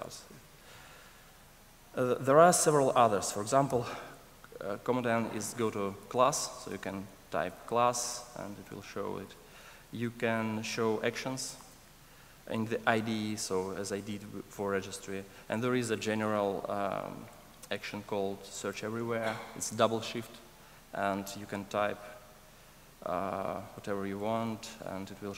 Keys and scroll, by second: 3.7 super+o.